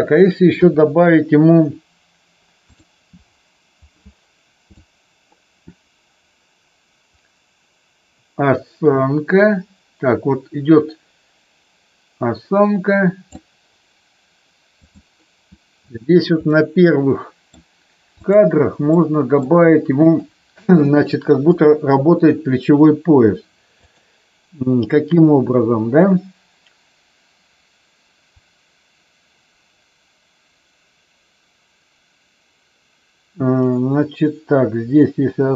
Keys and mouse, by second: 0.5 KP_3, 2.7 click, 4.8-13.3 drag, 14.8 click, 16.4-17.5 middle drag, 18.3 click, 18.9-19.4 middle drag, 21.4 KP_3, 23.8 click.